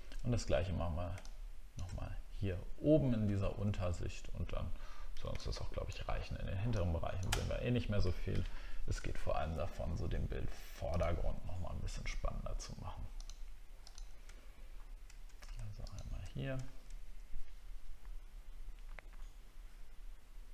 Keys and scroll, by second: 3.2 alt+scroll up 1, 3.4 alt+scroll down 1, 7.5 alt+scroll down 1, 8.5 alt+scroll up 1, 14.4 alt+scroll up 1, 16.6 alt+scroll down 1.